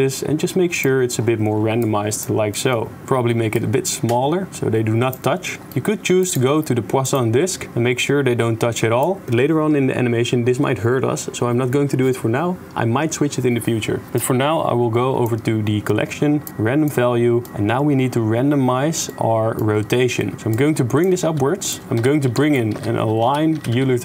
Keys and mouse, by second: 2.0 middle click, 2.5 middle click, 3.5-5.2 shift+drag, 5.6 drag, 6.2-7.5 drag, 9.1 shift+click, 14.1-15.3 drag, 16.4 click, 17.4-19.6 middle drag, 20.5 click, 21.2 g, 21.9 x, 22.4 shift+a.